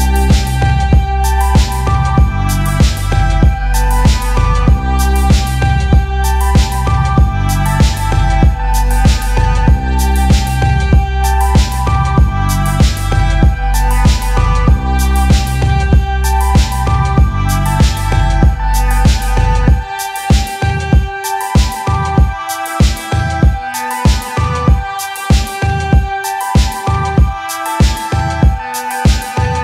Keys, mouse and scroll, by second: 1.2 click, 2.4 click, 3.7 click, 4.2 click, 7.9 click, 8.6 scroll, 9.9 click, 10.9 click, 11.7 click, 12.3 click, 13.1 click, 15.3 click, 15.7-16.5 scroll, 16.5 click, 18.7 click, 19.2 click, 20.9 click, 23.6 alt+click, 24.7 click, 27.3 click.